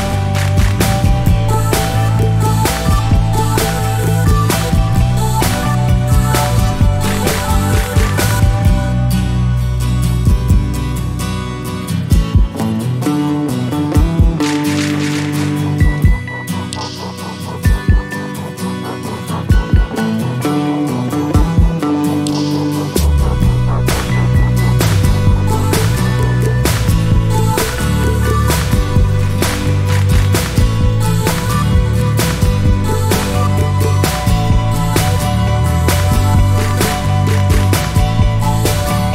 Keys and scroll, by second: 19.5 typing, 20.9 typing, 22.5 typing, 30.4-31.9 typing.